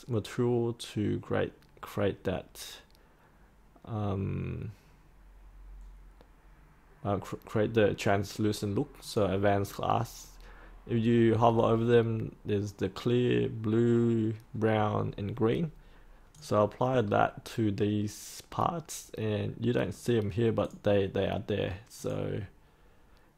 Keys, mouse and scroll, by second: 17.0 scroll down 1, 19.1 scroll up 1, 20.5 click, 22.7-23.3 scroll down 1.